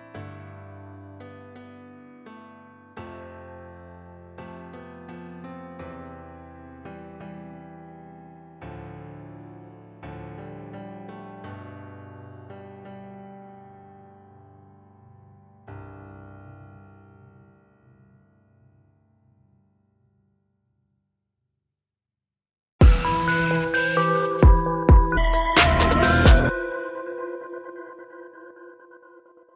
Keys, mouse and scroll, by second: 1.1 click, 2.2 scroll down 1, 3.3 click, 5.5-6.0 scroll down 1, 6.7 click, 9.0 space, 9.8 click.